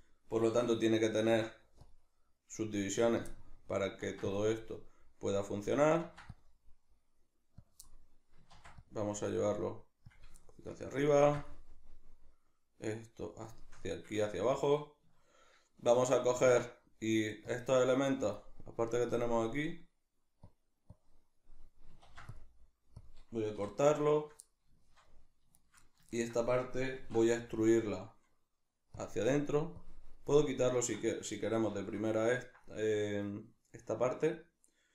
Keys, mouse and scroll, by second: 1.3 ctrl+r, 3.1 click, 3.3-5.7 middle drag, 4.0 ctrl+r, 5.7 click, 6.0 ctrl+r, 7.7 click, 7.9-10.2 middle drag, 8.5 ctrl+r, 10.2 click, 10.4-13.3 shift+middle drag, 11.2 ctrl+r, 13.3 click, 13.5-18.3 shift+middle drag, 16.4 ctrl+r, 18.3 click, 20.5 click, 22.0 ctrl+r, 23.1 click, 23.2 middle click, 23.5 3, 23.8 right click, 24.1 shift+right click, 24.4-25.5 middle drag, 25.5 shift+right click, 25.8-29.1 middle drag, 26.9 alt+e, 29.1 click, 29.8 click, 30.3-34.9 middle drag.